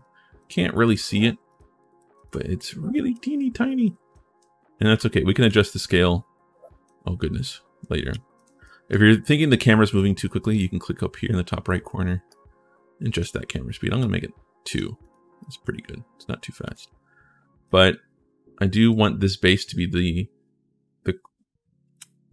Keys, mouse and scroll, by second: 0.6 s, 1.2 w, 4.1 a, 5.2 w, 7.3-8.7 typing, 10.2 click, 12.0 click, 13.8 click, 14.8 click, 15.2-17.4 drag, 15.4 w, 16.4 s, 18.6 click.